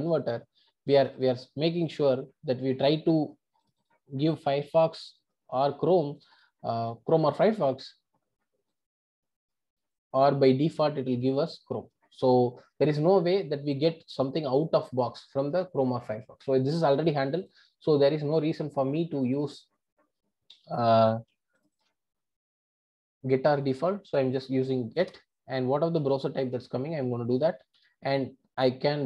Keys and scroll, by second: 25.1 Return.